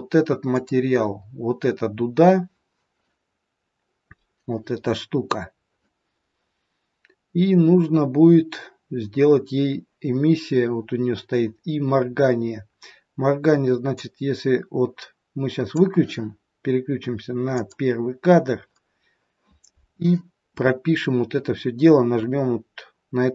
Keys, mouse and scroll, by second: 0.4 click, 13.9 click, 17.6 click.